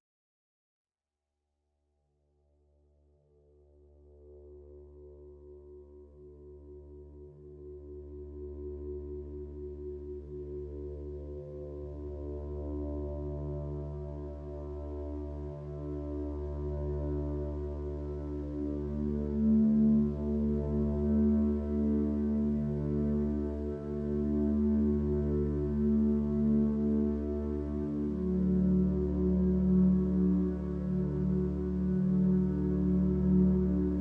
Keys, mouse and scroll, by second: 10.9 ctrl+z, 18.2 ctrl+d, 18.6 ctrl+space, 19.9 click, 25.2 ctrl+d, 25.8 ctrl+space, 27.0 space, 27.7 ctrl+space, 28.4 space, 29.2 ctrl+space, 31.8 ctrl+z.